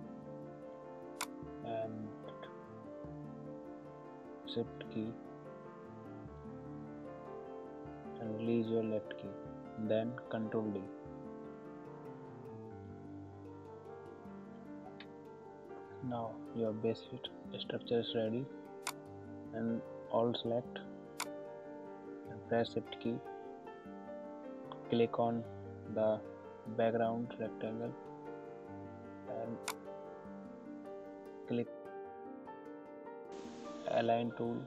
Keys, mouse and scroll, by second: 1.2-11.2 alt+drag, 13.1 ctrl+d, 18.8 click, 21.2-29.6 drag, 33.4 click.